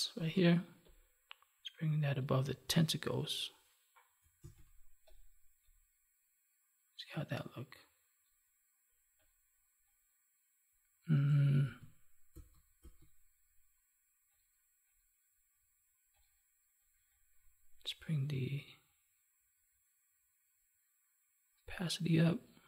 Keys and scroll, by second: 4.3 ctrl+z, 11.6 ctrl+z.